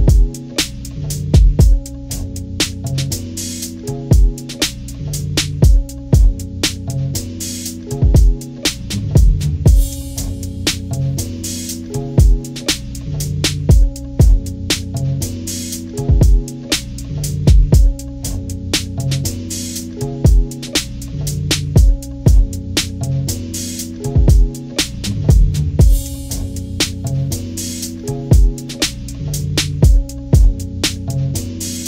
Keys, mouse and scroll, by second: 6.5-11.7 drag, 13.4 ctrl+z, 14.8 click, 19.0-22.7 drag, 24.1 ctrl+scroll up 2, 24.4 ctrl+-, 24.8 ctrl+scroll up 2, 25.0 ctrl+=, 25.5 ctrl+=, 25.7 ctrl+scroll down 2, 25.9 ctrl+=, 26.0 ctrl+=, 26.2 ctrl+=, 26.5-27.6 scroll up 2, 27.6-31.8 drag.